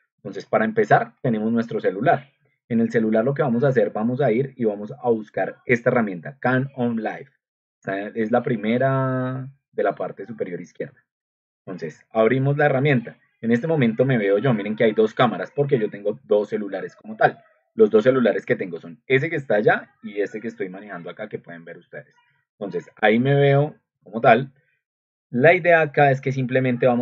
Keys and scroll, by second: 17.1 ctrl+alt+3.